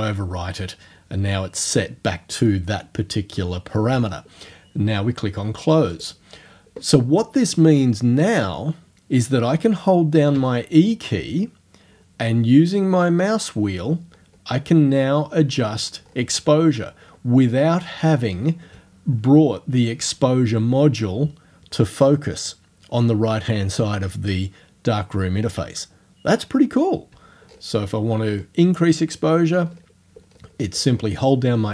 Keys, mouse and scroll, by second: 6.0 click, 7.1-9.8 drag, 10.4 e, 12.6-14.8 scroll down 5, 15.0-17.5 scroll down 4, 27.1 e, 27.5 scroll up 1, 28.3-28.8 scroll up 1, 29.0-31.6 scroll up 9.